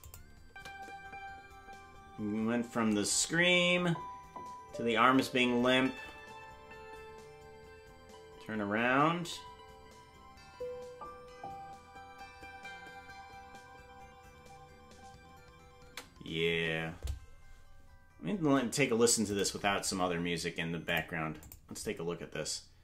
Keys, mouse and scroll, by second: 0.0 click, 0.0 scroll down 10, 0.4 space, 15.8 space.